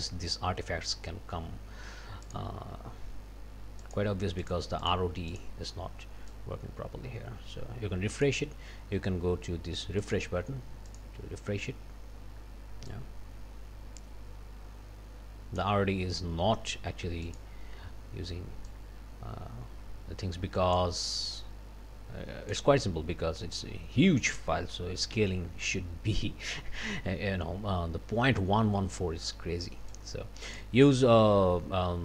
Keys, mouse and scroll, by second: 2.2 click, 3.8 click, 4.4 click, 4.8 click, 5.3 click, 6.3-8.4 drag, 10.0 click, 10.9 click, 12.9-15.8 drag, 17.3 click, 18.7-21.0 drag, 21.4-22.7 drag, 24.3 click, 25.1 d, 29.9 click.